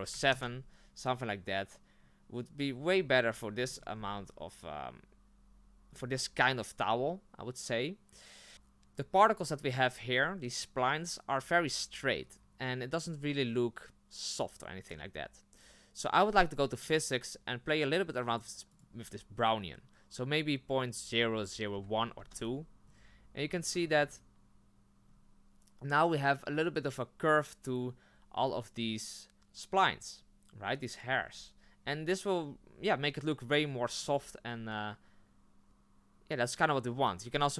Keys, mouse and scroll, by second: 3.3-4.0 scroll up 11, 24.2 click, 25.0 scroll up 3, 31.1 scroll down 4, 31.8 scroll down 3, 33.5-34.2 scroll up 7, 36.9 scroll down 2.